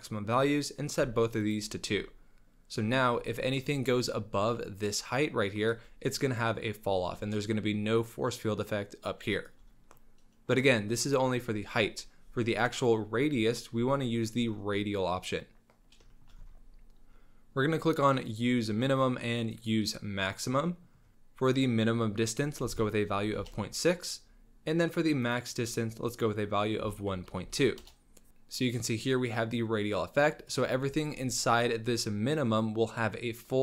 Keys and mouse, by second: 2.0-2.7 drag, 2.7 middle click, 2.9 shift+drag, 3.8-5.7 shift+drag, 7.4-9.5 shift+drag, 9.9-10.2 middle drag, 10.2-10.6 drag, 16.1 shift+drag, 16.2 shift+middle click, 18.6-19.7 drag, 19.8-20.6 drag, 20.6 middle drag, 20.8 click, 20.8 middle click, 21.1 KP_Decimal, 21.1 KP_6, 21.6-23.8 drag, 25.3-28.1 drag, 30.6 click, 31.2-33.6 shift+drag.